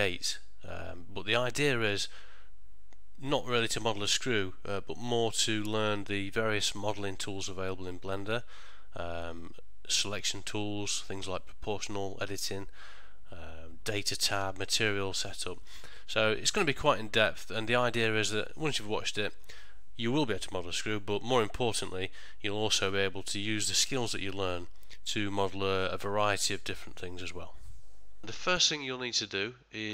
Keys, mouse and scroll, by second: 29.4 click.